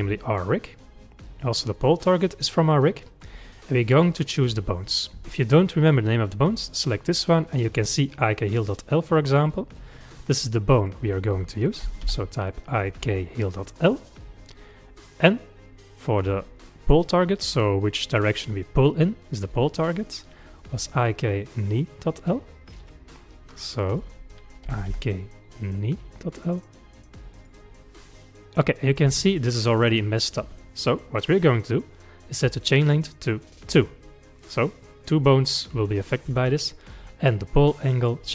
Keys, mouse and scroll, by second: 1.7 click, 6.5 click, 9.4 click, 10.8-13.8 drag, 19.7 click, 22.8 click, 23.9-27.1 drag, 33.0-36.5 drag, 38.0-38.3 drag.